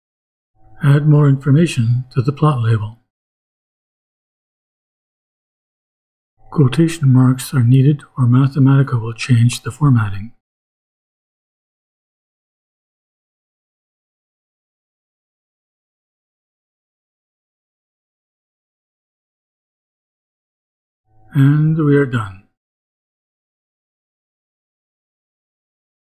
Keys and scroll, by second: 7.6 space, 11.1 ', 12.4 BackSpace, 13.1 shift+BackSpace, 13.4 shift+', 16.1 shift+', 17.3 shift+Return.